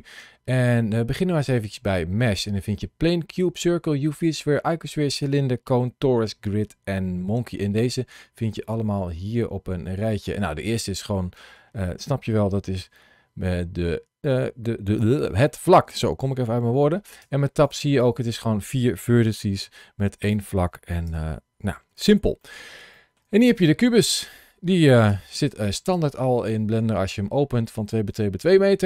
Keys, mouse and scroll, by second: 0.2 shift+a, 9.2-9.6 scroll up 2, 9.7 shift+middle click, 10.6 click, 11.2 middle click, 12.7 KP_Decimal, 13.6 scroll down 1, 14.8 scroll down 1, 14.9 shift+middle click, 15.3 middle click, 17.2 Tab, 17.5 click, 17.9 click, 19.1 g, 20.1 right click, 20.9 Tab, 21.8 shift+middle click, 22.3 middle click, 22.8 middle click, 23.3 click, 25.0 Tab, 27.1 Tab.